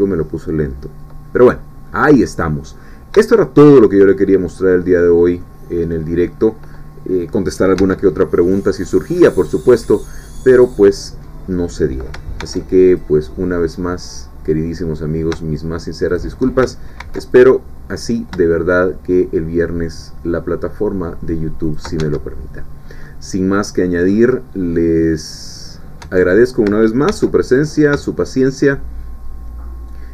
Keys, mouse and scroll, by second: 1.7-2.2 scroll down 1, 2.2-3.1 scroll up 1, 3.3 shift+middle click, 4.4-4.8 scroll up 1, 4.8-5.5 scroll down 1, 5.5 middle click, 6.0-6.4 scroll up 1, 7.8 Tab, 12.4 ctrl+r, 12.9 ctrl+click, 16.1 shift+click, 17.0 ctrl+r, 17.3 ctrl+click, 21.6 shift+click, 22.0 shift+Tab, 22.6-22.9 shift+scroll down 3, 23.0-24.3 drag, 24.4 scroll down 2, 24.7-26.0 drag, 26.0 middle click, 26.1 Tab, 27.1 ctrl+r, 27.5 ctrl+click.